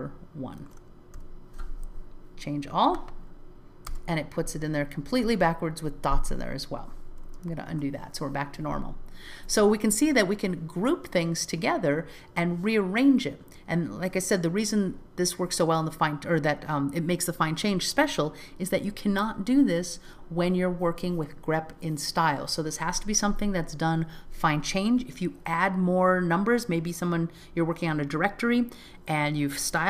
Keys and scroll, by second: 3.9 Return, 7.7 super+z.